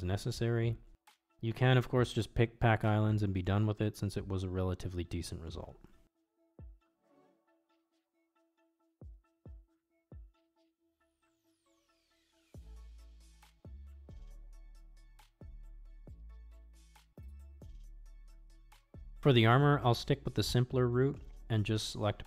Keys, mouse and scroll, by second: 0.4 g, 2.3 r, 5.5 s, 8.0 g, 10.7 l, 11.3 g, 13.1 s, 14.8 g, 15.9 shift+middle click, 16.7 shift+middle click, 17.4 g, 21.1-22.2 drag.